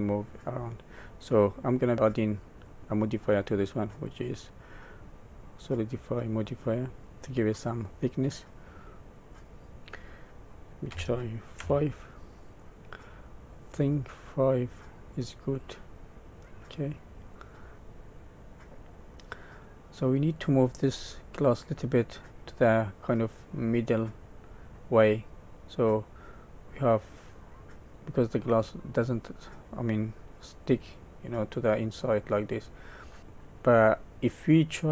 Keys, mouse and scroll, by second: 0.3 middle click, 2.4 click, 3.9 click, 6.7 middle click, 7.9-9.1 scroll up 2, 9.3 click, 12.6 middle click, 15.9 middle click, 17.6 middle click, 17.7 middle click, 17.7 scroll up 1, 21.0 middle click, 25.5 middle click, 29.9 middle click, 31.4 middle click, 33.2 middle click, 33.2 scroll down 2, 33.3 middle click.